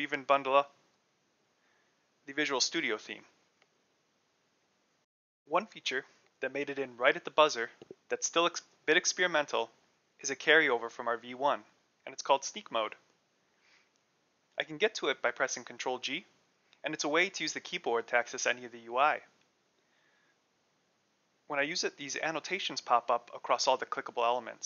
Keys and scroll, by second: 0.0-0.1 typing, 0.8 super+n, 0.9 super+n, 2.0 Return, 12.8 ctrl+g.